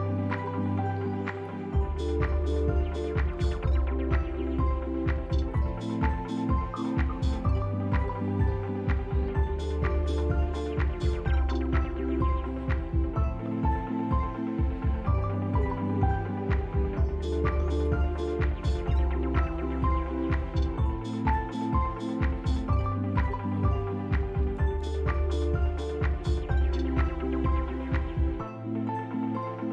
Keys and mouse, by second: 0.5 click, 1.4 s, 3.0 s, 7.0 g, 9.2-10.4 drag, 13.9 click, 17.9 click, 18.9 click, 21.4-22.6 drag, 23.2 p, 24.2 Tab, 25.0 click, 25.8 x, 28.3 g.